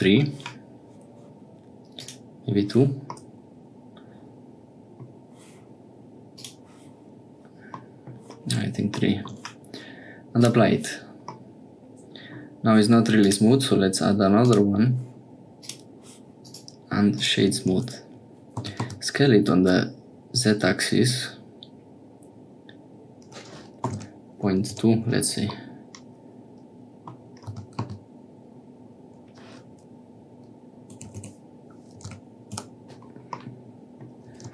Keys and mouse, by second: 1.9 click, 3.1-5.0 middle drag, 6.3 click, 7.8 middle click, 10.4 click, 11.3 click, 13.3-14.5 drag, 15.6 click, 18.6 s, 25.6-27.2 middle drag, 33.4 click.